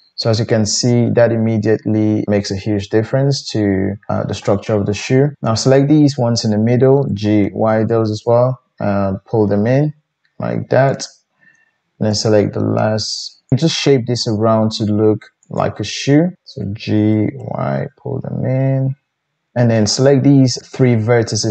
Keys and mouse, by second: 5.6 shift+middle click, 5.6 shift+right click, 7.1 g, 12.1 middle click, 12.1 right click, 13.9 g, 17.1 g, 20.6 shift+middle click, 20.8-21.5 shift+drag.